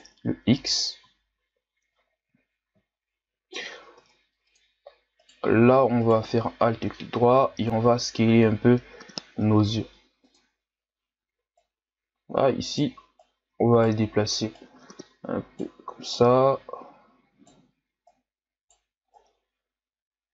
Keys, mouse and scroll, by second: 1.2-2.8 shift+scroll down 2, 2.8-3.6 shift+scroll up 1, 3.6-3.9 scroll up 1, 3.9 ctrl+Tab, 5.2 alt+right click, 6.0 alt+right click, 6.8-7.4 shift+scroll up 4, 7.4 s, 11.6 right click, 13.2 right click, 14.5 right click, 16.1 right click, 18.0 right click, 19.1 right click.